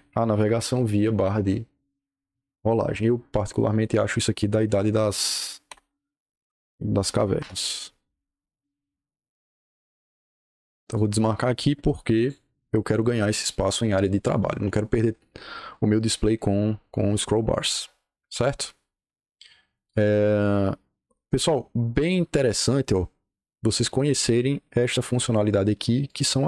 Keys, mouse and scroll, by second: 0.2 Escape, 1.7-4.3 drag, 4.6 click, 5.0 click, 5.6 Delete, 6.3 Escape, 6.5 Escape, 6.7-7.6 typing, 10.7 click, 12.0 click, 26.0 click.